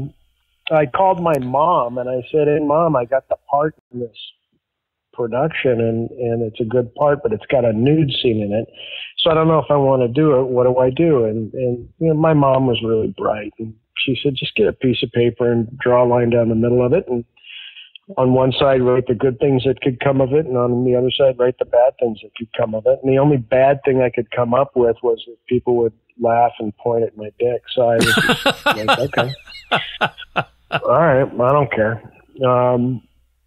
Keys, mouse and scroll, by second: 2.3 click, 3.7 Delete, 5.0 click, 5.8 click, 6.5-9.6 drag, 10.2 click, 11.3 click, 12.3-14.4 drag, 15.3 click, 16.3 click, 17.0 ctrl+s.